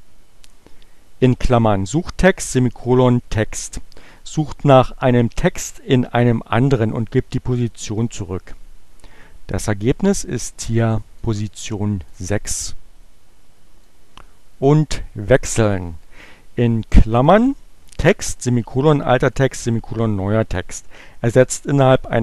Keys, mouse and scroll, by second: 9.7 Return, 11.2 click, 12.2 click, 13.9-15.1 drag.